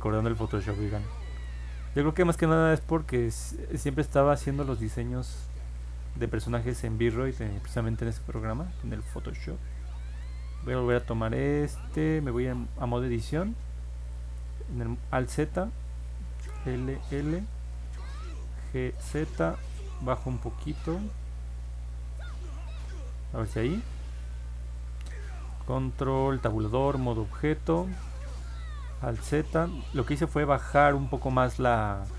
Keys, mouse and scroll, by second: 1.0 click, 3.0-4.0 drag, 4.3 middle click, 4.5 middle click, 4.6 middle click, 6.6 middle click, 6.9 middle click, 8.0 click, 9.7 click, 11.5 ctrl+Tab, 14.9 alt+z, 18.6-19.5 typing, 22.8 click, 24.8 ctrl+Tab, 28.0 middle click, 29.0 alt+z, 29.6 click, 31.4 middle click.